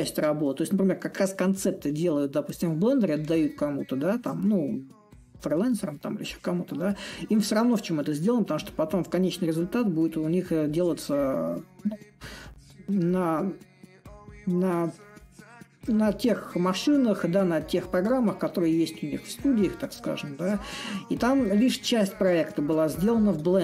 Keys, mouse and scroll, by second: 0.0-5.0 drag, 6.0-11.0 drag, 11.8-16.8 drag, 17.1-22.1 drag.